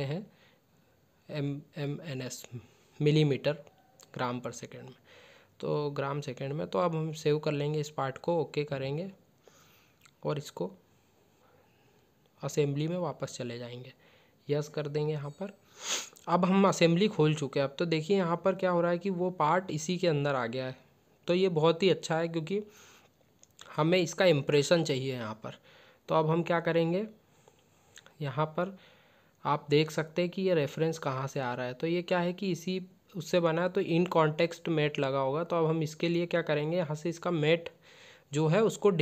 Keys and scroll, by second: 4.8 ctrl+s, 8.1 ctrl+s.